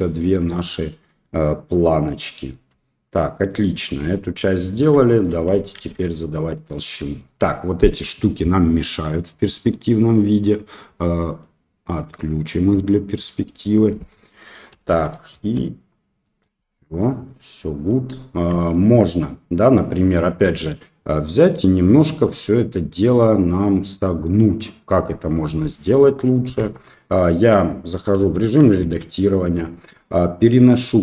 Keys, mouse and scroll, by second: 2.5-3.5 middle drag, 4.0 Tab, 4.3 middle drag, 5.0 shift+middle drag, 5.7 shift+z, 7.1 click, 9.6 click, 11.2 click, 12.0 click, 13.3 drag, 13.6 middle drag, 14.7 KP_1, 15.3 KP_3, 16.2 middle click, 16.9 middle drag, 17.7 click, 18.6 middle click, 20.6 middle click, 22.4-25.1 middle drag, 26.5 Tab, 28.1 KP_1, 28.7 KP_3, 30.7 click.